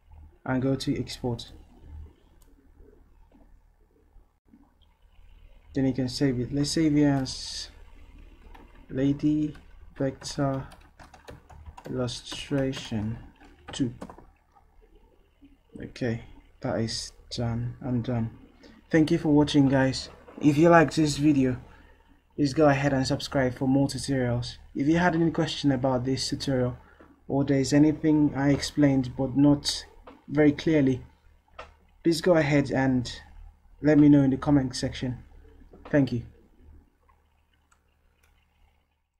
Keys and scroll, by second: 8.1-9.5 typing, 14.1 typing.